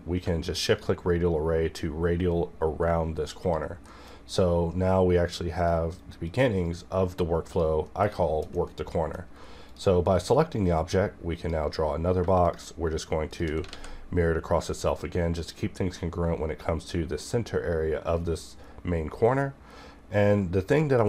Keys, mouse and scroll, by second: 0.6 shift+click, 1.3-2.7 scroll down 1, 2.7-3.4 scroll up 1, 3.4 click, 3.9 middle click, 4.2-5.6 scroll up 1, 5.6 click, 5.9 right click, 6.2 click, 7.8 middle click, 7.9 scroll up 1, 8.0 KP_1, 8.6 middle click, 9.7-12.4 drag, 13.7 alt+x, 14.6 click, 19.2 shift+Num_Lock, 19.2 click.